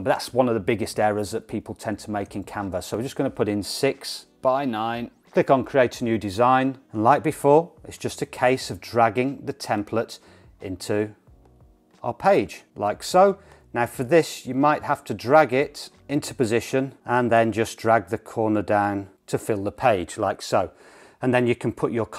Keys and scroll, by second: 4.3 6.